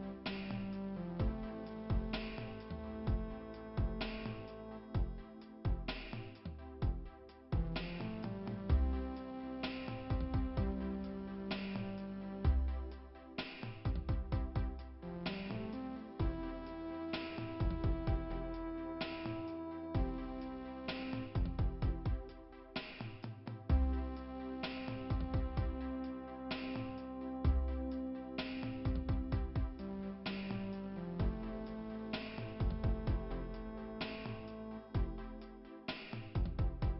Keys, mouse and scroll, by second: 1.3 click, 2.6 click, 3.7 middle click, 3.8 click, 3.9 middle click, 5.6 middle click, 6.4 click, 6.9 middle click, 8.2 click, 10.8 click, 15.9-16.6 scroll up 1, 16.6 scroll up 1, 16.7 scroll down 1, 19.2 click, 20.4 right click, 22.9 middle click, 27.4 right click, 27.6 right click, 31.3 click, 33.1 click, 34.8 click, 34.9 click, 36.6 click.